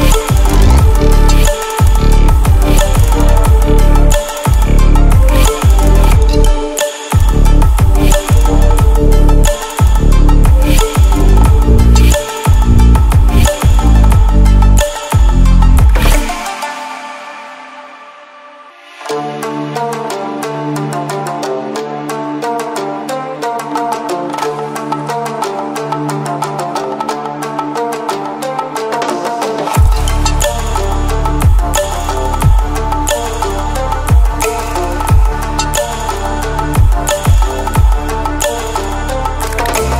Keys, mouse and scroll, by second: 3.0-3.9 scroll up 1, 5.6 click, 18.8 ctrl+w, 22.3 ctrl+w, 24.0 click, 25.5 ctrl+alt+scroll down 1, 25.9 ctrl+alt+scroll up 1, 27.1 ctrl+scroll down 1, 27.8 ctrl+scroll up 1, 29.3-30.0 click, 38.0-39.9 drag.